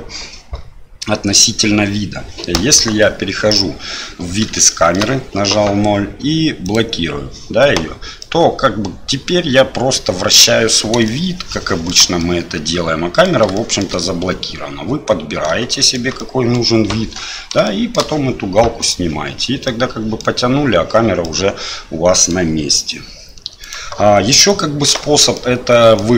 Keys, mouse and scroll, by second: 2.6 KP_0, 4.6 shift+middle click, 6.6 click, 8.2-9.3 middle drag, 11.0-11.9 shift+middle drag, 12.2-13.2 middle drag, 13.5 shift+middle drag, 14.0-15.4 middle drag, 15.7 shift+middle drag, 16.2 middle click, 17.6 shift+middle click, 18.8 click, 19.6-20.2 middle drag, 21.2-22.3 middle drag, 23.6 right click, 24.9 shift+middle drag, 25.3-26.0 middle drag.